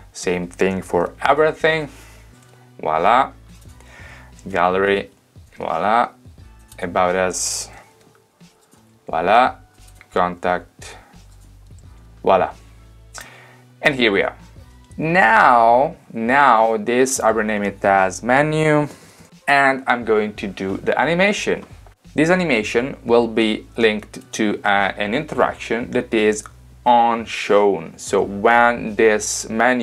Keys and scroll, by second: 1.0 super+c, 2.5 super+v, 4.6 super+c, 5.6 super+v, 7.8 super+c, 9.1 super+v, 10.4 super+c, 12.0 super+v, 18.7-19.7 typing, 20.1 Return.